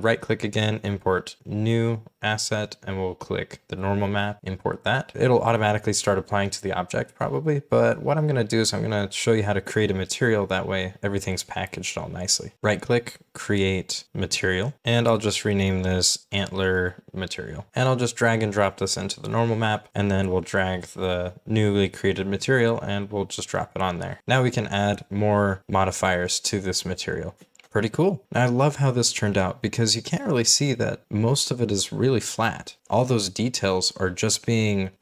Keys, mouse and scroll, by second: 10.9-11.4 scroll down 1, 11.4-12.2 scroll up 1, 12.2-12.5 scroll down 1, 15.6-18.1 typing, 21.4-22.1 scroll up 1, 25.4-26.1 scroll up 1, 32.9-33.3 scroll down 1, 33.3 middle click, 33.8-34.8 scroll up 1.